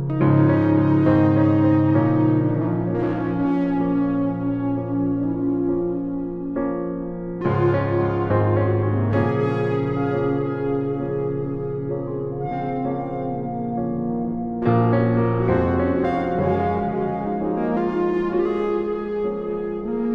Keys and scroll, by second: 0.9 alt+shift+Return, 1.8 Down, 2.2 Down.